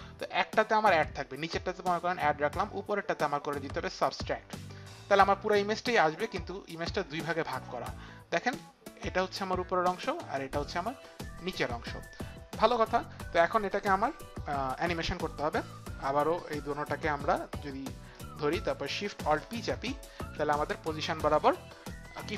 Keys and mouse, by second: 0.0 m, 3.2 click, 6.1 click, 10.3 click, 10.7 click, 11.6 click, 14.7 click, 17.6 click, 18.6 ctrl+click, 20.2 alt+shift+p.